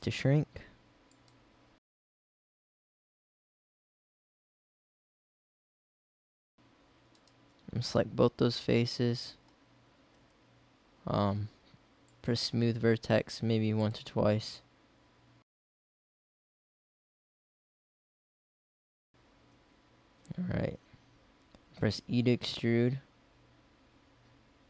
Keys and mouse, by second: 2.3 middle click, 4.0 s, 4.2 click, 4.8 s, 5.2 click, 6.0 s, 8.0 middle click, 10.2 KP_1, 14.7 middle click, 15.9 s, 16.4 middle click, 17.1 middle click, 17.8 s, 18.7 middle click, 19.1 KP_1, 21.9 e.